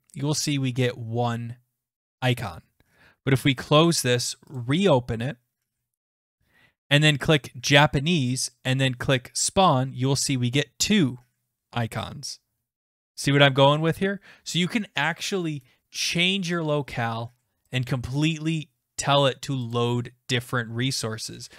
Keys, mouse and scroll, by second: 3.6 click, 4.6 click, 6.8 click, 7.8 click, 9.5 click, 13.7 click, 15.3 click, 17.0 click, 17.8 click, 19.7 click.